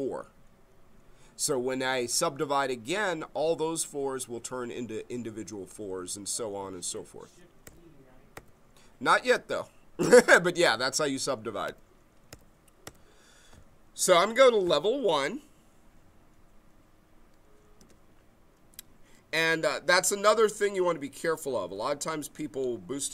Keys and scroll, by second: 7.6 Page_Down, 8.3 Page_Up, 10.0 Page_Down, 11.6 Page_Up, 12.3 Page_Down, 12.8 Page_Up, 17.8 w.